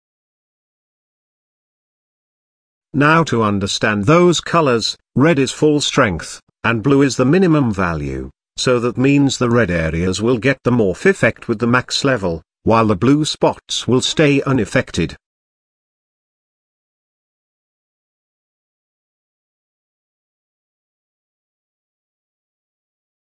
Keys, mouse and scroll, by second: 1.7 click, 2.7 click, 3.7 click, 4.9 click, 6.1 click, 7.4-9.4 middle drag, 9.4 shift+scroll up 1, 9.5-12.0 shift+middle drag.